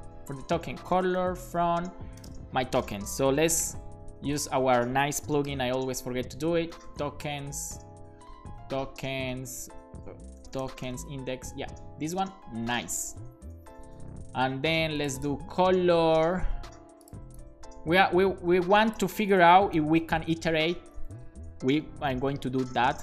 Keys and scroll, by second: 0.9-2.2 typing, 3.6 ctrl+super+h, 5.5 shift+super+h, 6.7-7.5 typing, 10.4-11.6 typing, 12.1 super+s, 13.0 BackSpace, 13.8 super+s, 19.6 BackSpace, 20.4 super+v, 20.9 ., 22.7 Return.